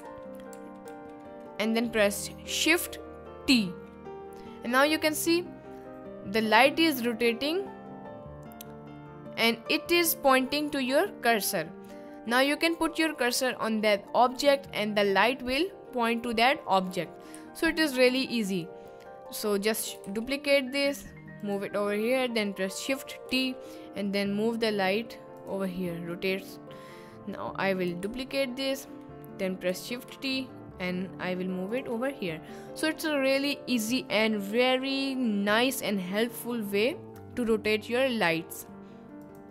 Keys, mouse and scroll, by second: 0.5 ctrl+z, 0.9 ctrl+z, 3.5 shift+t, 14.9 middle click, 17.3 s, 18.1 drag, 20.0 shift+d, 21.4 click, 22.0 middle click, 22.8 middle drag, 23.2 shift+t, 25.3 click, 25.8 middle click, 26.8 middle click, 27.7 middle click, 28.0 shift+d, 29.1 middle click, 30.1 shift+t, 31.7 click, 32.1-32.6 middle drag, 32.7 middle click.